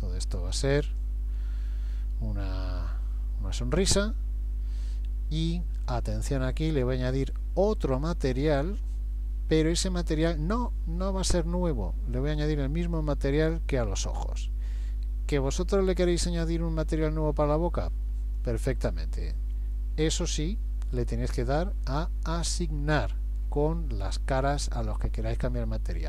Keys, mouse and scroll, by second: 0.4 shift+click, 0.9 click, 2.3 middle click, 8.6 click, 12.9 click.